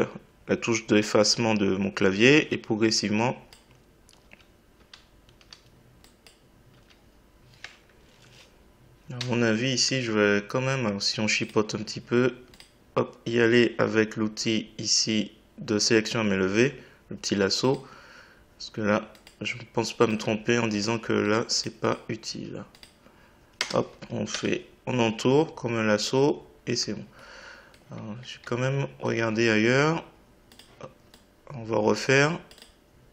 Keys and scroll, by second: 1.0 Delete, 2.2 Delete, 4.2 Delete, 6.7 Delete.